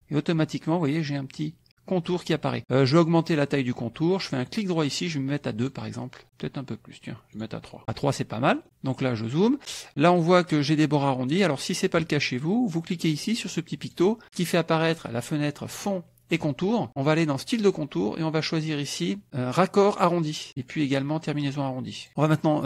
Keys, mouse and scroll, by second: 4.5 right click, 5.6 click, 7.4 right click, 8.5 middle click, 13.8 click, 17.4 click, 20.2 click, 22.0 click, 22.3 click.